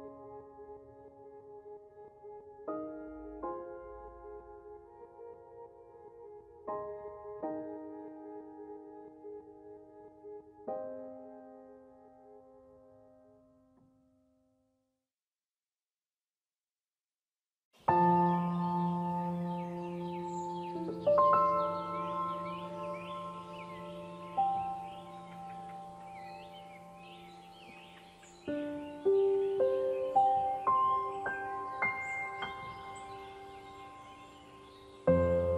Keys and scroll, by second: 0.9 ctrl+0, 6.2 ctrl+z, 16.4 ctrl+z, 30.8 ctrl+g.